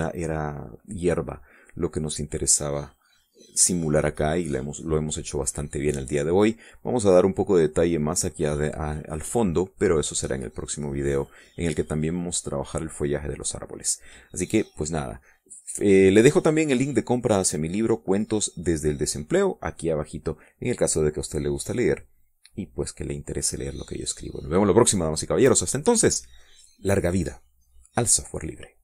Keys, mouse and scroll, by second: 1.4 click, 3.6-5.0 drag, 7.0 click, 12.0 middle click.